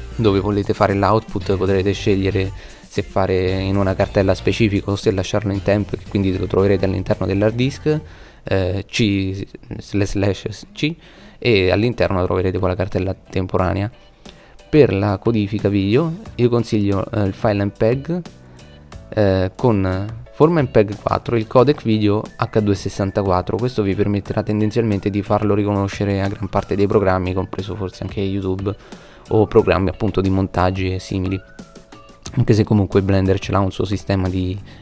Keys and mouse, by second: 12.7-14.3 middle drag, 14.9-15.3 middle drag, 15.7-18.9 middle drag, 20.1-22.1 drag, 31.9-33.7 middle drag, 34.2 KP_9.